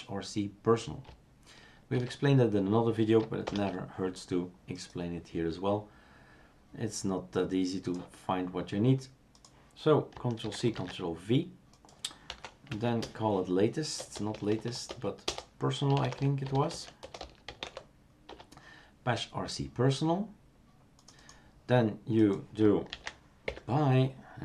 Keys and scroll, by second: 1.9 shift+super+q, 3.5 shift+super+Return, 10.4 ctrl+c, 10.7 ctrl+v, 12.3 F2, 12.7 Right, 13.0-18.1 typing, 18.3 Return, 23.0 ctrl+a, 23.4 Delete.